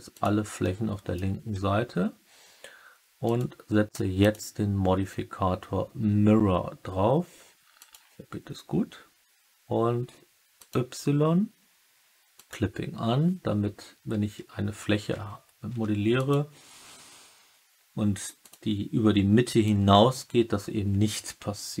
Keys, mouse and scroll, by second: 0.5 alt+click, 1.5 Tab, 3.2 click, 4.1-7.8 drag, 10.5 click, 12.3 click, 15.6 Tab, 16.1 click, 18.3 click, 19.6-21.8 drag.